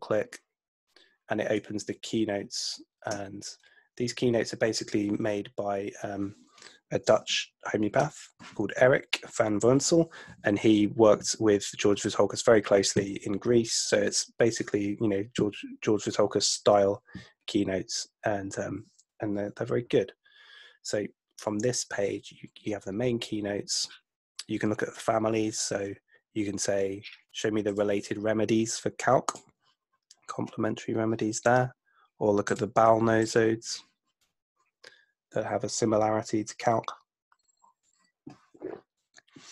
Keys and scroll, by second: 7.3 super+F2.